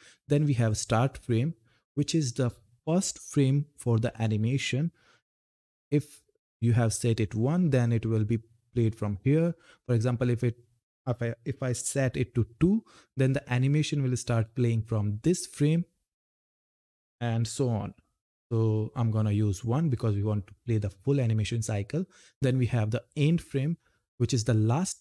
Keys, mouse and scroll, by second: 0.4 click, 21.8 click.